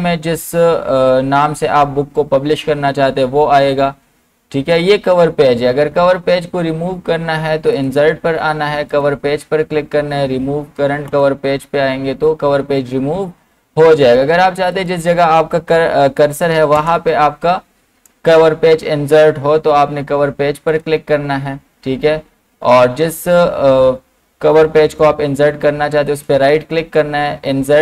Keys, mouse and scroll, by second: 0.9-1.9 scroll up 1, 7.7 scroll up 1, 7.8 click, 14.7 click, 16.8 Return, 20.7 click, 26.1 right click.